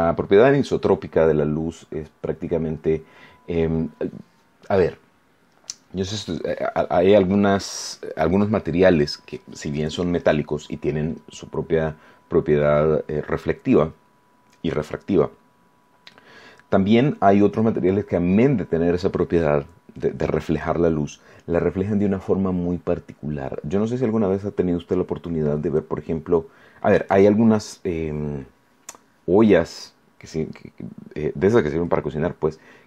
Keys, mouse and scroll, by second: 2.7-3.1 scroll up 2, 3.2 scroll down 2.